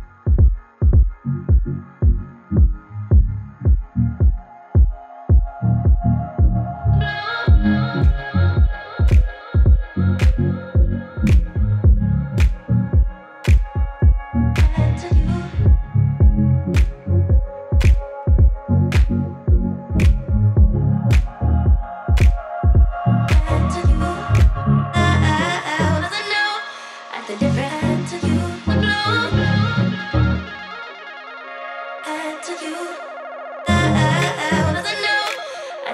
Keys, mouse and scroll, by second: 0.7 click, 5.6-7.5 typing, 8.0-11.9 drag, 12.4-21.6 drag, 22.4-23.8 typing, 25.1 click, 28.4-35.9 drag.